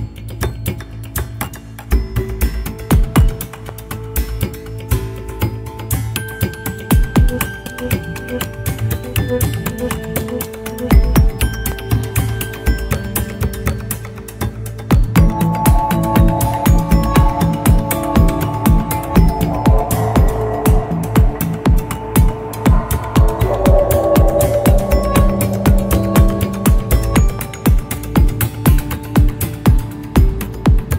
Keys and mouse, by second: 1.0 click, 2.5-4.0 middle drag, 8.4-12.6 drag, 13.0-15.4 drag, 17.1-17.9 middle drag, 18.5 shift+middle drag, 19.7-20.9 middle drag, 22.3-23.6 shift+middle drag, 24.3-25.0 shift+middle drag, 26.7-27.8 shift+middle drag, 28.1-30.9 middle drag.